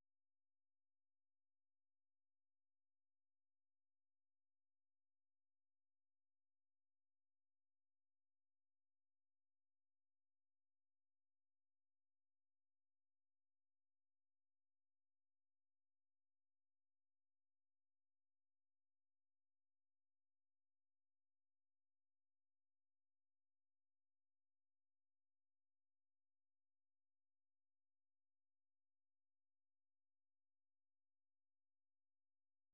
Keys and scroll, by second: 0.0-2.8 typing, 8.1-10.0 typing, 11.1 ctrl+p, 12.9-21.4 typing, 15.3 Escape, 26.0 typing, 28.9-29.8 typing, 30.8 ctrl+n, 31.1-32.3 typing.